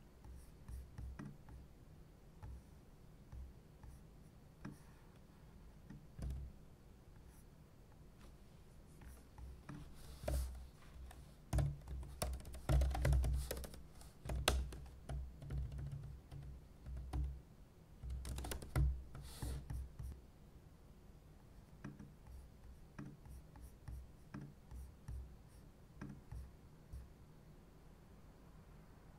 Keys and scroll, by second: 6.2 super+c, 10.2 super+n, 11.2-19.6 typing.